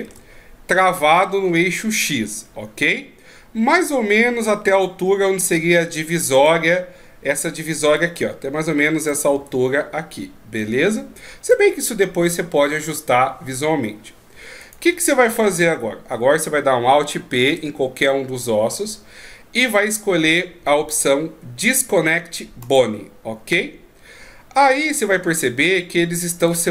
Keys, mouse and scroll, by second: 0.0 shift+e, 7.8 d, 8.0 click, 9.1 d, 9.4 d, 9.5 right click, 11.5 d, 14.6 right click, 17.4 alt+p, 26.5 click.